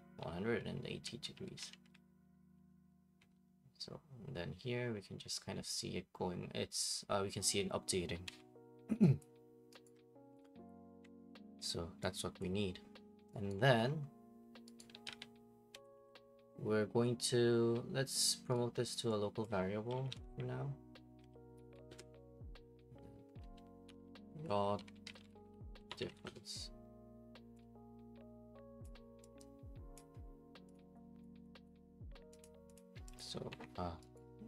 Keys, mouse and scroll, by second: 0.0-3.2 typing, 8.2 Escape, 9.2 click, 9.8 right click, 10.7 click, 11.0 Delete, 12.4 click, 13.5 right click, 14.6-15.6 typing, 14.8 right click, 15.7 Escape, 15.9 Escape, 18.5 right click, 19.4 click, 19.7-21.2 typing, 21.9 Return, 23.6-26.6 typing, 28.8 click, 30.0 click, 30.7 click, 31.2 click, 31.7 click, 32.4 click, 32.7 click, 33.2 click, 33.5 Escape, 34.2 click.